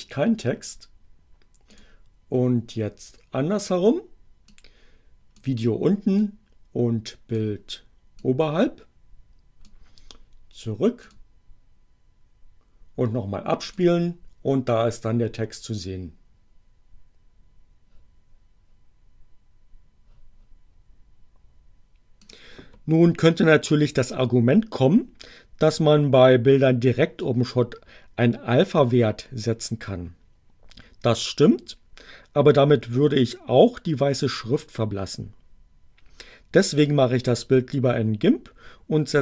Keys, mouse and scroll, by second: 1.7 click, 4.5 click, 6.1-7.6 drag, 8.2-9.9 drag, 11.0 click, 13.6 click, 22.1 click.